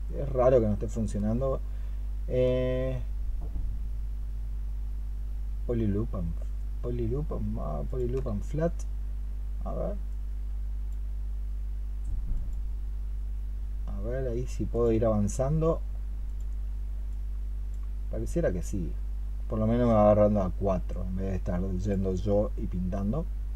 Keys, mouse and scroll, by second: 1.1-8.0 space.